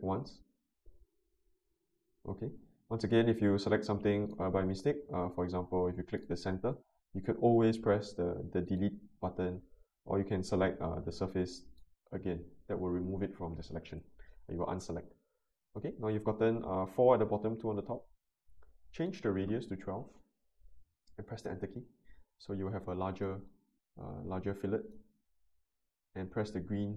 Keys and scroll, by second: 19.7-20.5 typing, 21.4 Return.